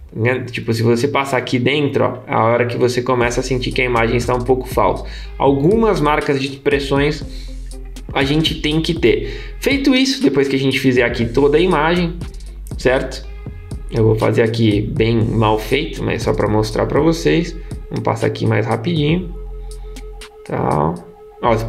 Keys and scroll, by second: 3.5 super+z.